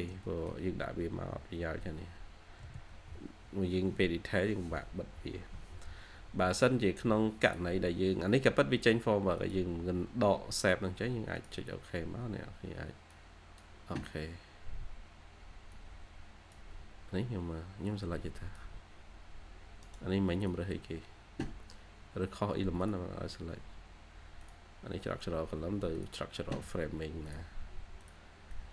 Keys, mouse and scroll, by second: 0.1 middle click, 0.8-2.6 typing, 1.5 scroll up 1, 4.4 scroll up 1, 5.3 typing, 11.8 scroll down 1, 12.9 typing, 14.4 scroll up 1, 17.0 scroll down 1, 17.3 typing, 19.7 right click.